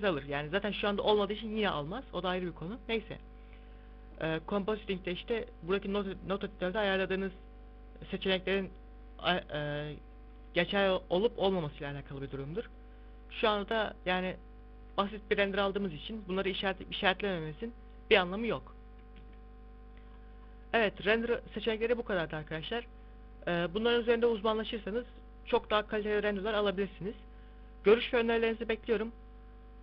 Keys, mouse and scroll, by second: 5.3 click, 19.1 Escape, 20.0-20.8 scroll up 5, 20.8 scroll down 1.